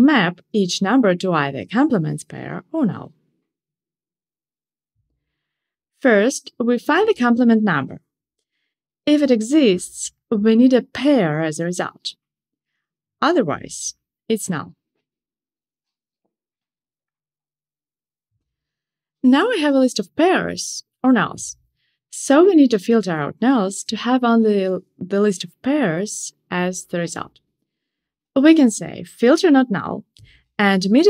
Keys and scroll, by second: 1.2 super+z, 4.6 Return, 19.4 Escape, 25.5 alt+shift+Left.